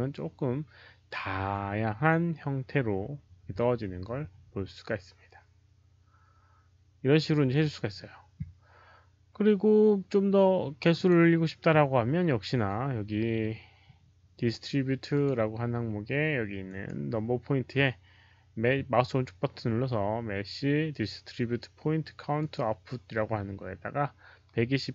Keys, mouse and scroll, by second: 7.5 click, 10.9 click, 15.0 click, 16.6 right click, 22.3 click.